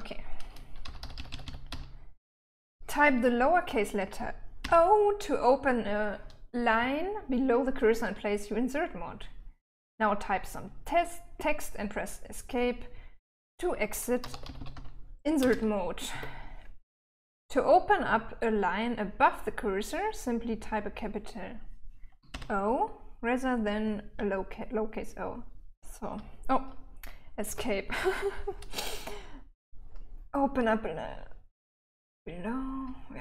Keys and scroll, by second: 1.1-2.2 typing, 4.9 o, 14.2-15.7 typing, 16.4 Escape, 22.6 shift+o, 25.8 j, 26.0 j, 26.1 j, 26.6 j, 27.8 Escape, 28.8-29.6 j, 29.7 j, 29.8 j, 33.1-33.2 j.